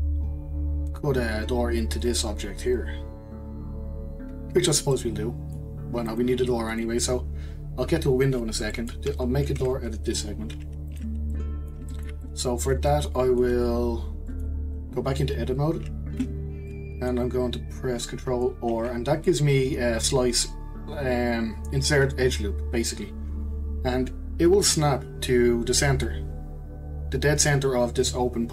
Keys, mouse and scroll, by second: 0.6-1.8 scroll down 1, 4.6-4.9 scroll down 2, 4.9-6.1 middle drag, 6.1 click, 6.7 click, 7.3-7.8 scroll down 5, 7.8-8.7 scroll up 1, 8.7 middle click, 9.6 Delete, 10.9 click, 11.3-16.2 middle drag, 16.2 Tab, 16.7-17.7 middle drag, 17.7-18.7 scroll up 1, 18.7 ctrl+r.